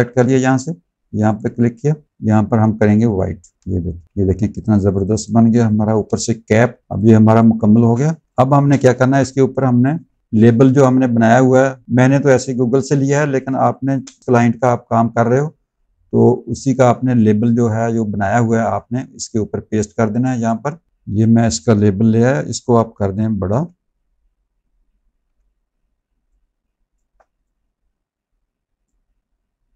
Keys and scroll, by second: 4.0 z, 5.4 space, 6.6-9.0 typing, 13.4 space, 23.2 ctrl+t, 25.1 v.